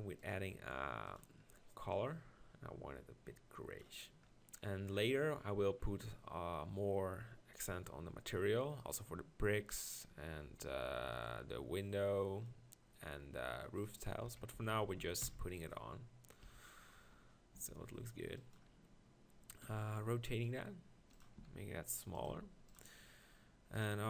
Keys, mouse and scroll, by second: 8.8-12.6 drag, 14.2 KP_1, 14.5-15.2 KP_4, 16.4 KP_4, 17.7 g, 19.6 r, 21.4 s, 22.3 g.